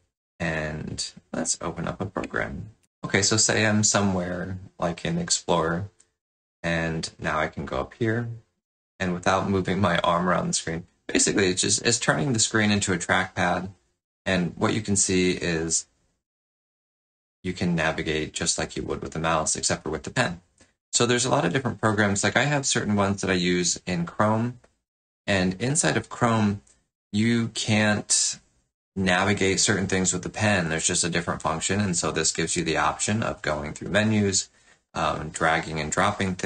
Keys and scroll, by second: 2.8 alt+Tab.